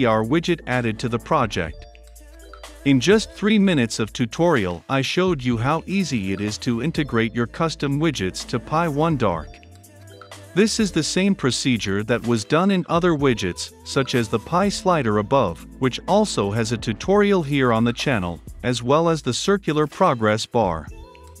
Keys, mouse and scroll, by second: 0.0-17.3 drag, 17.5-21.4 drag.